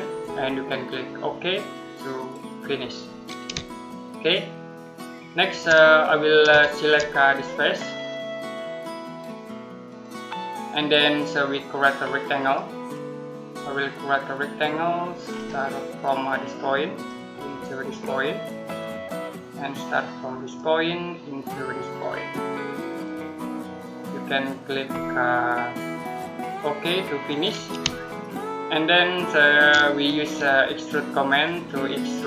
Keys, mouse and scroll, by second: 2.9 middle click, 3.6 shift+middle click, 5.7 middle click, 9.7 click, 12.2 click, 13.4 middle click, 14.8 scroll down 1, 15.1-15.6 scroll up 1, 15.6 middle click, 16.8 click, 25.6 right click, 27.1 click, 27.9 shift+middle click, 31.1 click, 32.0-32.2 scroll down 1.